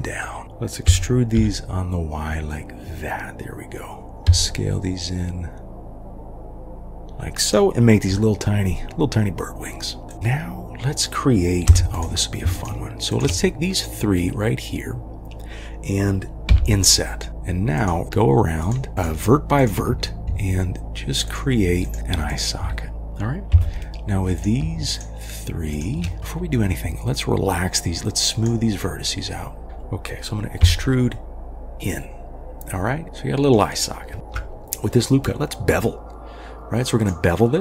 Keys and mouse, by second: 0.4 ctrl+z, 0.9 e, 4.1 KP_3, 4.3 s, 8.1 g, 11.7 3, 12.5 shift+click, 16.5 i, 18.0 g, 18.9 g, 19.9 g, 20.3 g, 22.0 g, 22.3 click, 22.6 g, 23.5 3, 24.3 click, 24.9 shift+click, 25.7 shift+click, 26.2-29.6 drag, 30.6 e, 33.0 middle click, 36.9 click.